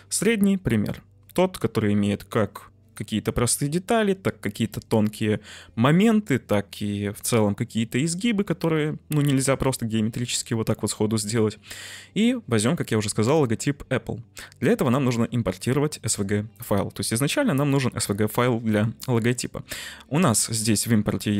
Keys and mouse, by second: 13.2-21.3 drag.